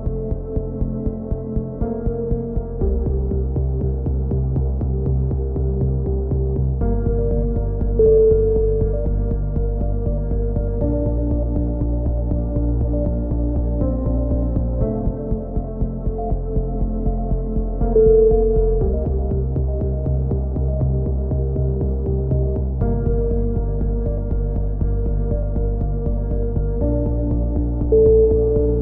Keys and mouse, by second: 1.8 z, 2.2 z, 2.6 b, 4.6 s, 6.9 a, 7.1 z, 7.5 middle click, 7.6 z, 8.0 click, 9.1 KP_3, 10.8 KP_1, 11.6 z, 11.8 z, 12.1 z, 12.5 click, 13.3 KP_3, 13.6 z, 14.4 b, 16.3 a, 16.9 ctrl+r, 18.0 a, 18.1 z, 18.7 click, 19.9 KP_3, 20.1 z, 21.0 b, 23.5 c, 25.1 click, 25.6 ctrl+KP_7, 27.1-28.8 middle drag, 27.4 b.